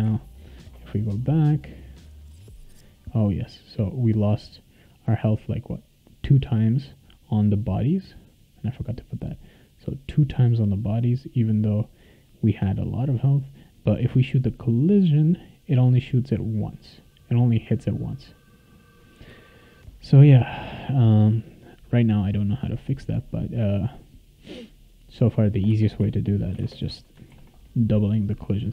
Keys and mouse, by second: 0.0 a, 1.9 click, 4.1 click, 5.9-19.2 right drag, 7.2 click, 9.4 click, 10.6 click, 13.8 click, 15.4 click, 16.1 click, 16.7 click, 17.1 click, 17.4 click, 17.6 click, 17.8 click, 18.0 click, 18.1 click, 18.3 click, 20.1 click, 25.2 click, 25.7 space, 26.5 shift+8, 26.6 space, 26.8 2, 27.3 ctrl+s.